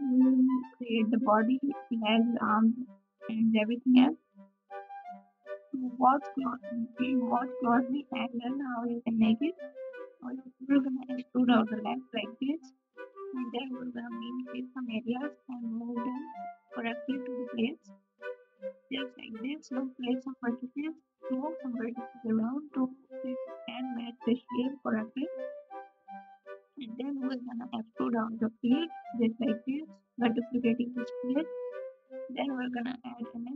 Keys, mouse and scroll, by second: 1.6 shift+a, 2.2 g, 4.3 alt+z, 4.8 KP_Add, 6.1 g, 7.0 s, 8.4 e, 9.2 KP_3, 9.3 s, 10.1 g, 11.4 n, 11.9 click, 12.8 KP_1, 13.5 r, 14.0 g, 15.4 ctrl+KP_Add, 15.4 g, 16.2 KP_1, 16.2 s, 18.8-19.8 drag, 18.8 g, 19.8 Tab, 19.8 alt+z, 20.4 alt+z, 20.4 Tab, 22.7 s, 22.9 o, 23.8 g, 26.5 KP_1, 27.7-29.4 drag, 29.4 Tab, 29.6 alt+z, 30.6 Tab, 31.5 shift+a, 33.1 r.